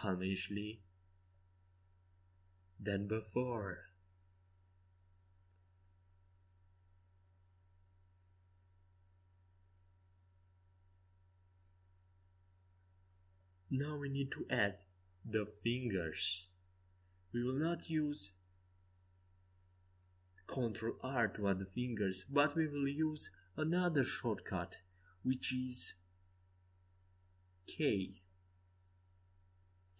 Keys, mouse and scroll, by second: 1.3 z, 3.7 middle click, 3.9 middle click, 7.5-9.2 middle drag, 12.4-15.7 middle drag, 13.2 z, 14.5 KP_5, 15.7 KP_3, 16.7-19.4 typing, 22.4 KP_5, 25.0 Tab, 28.3 ctrl+r.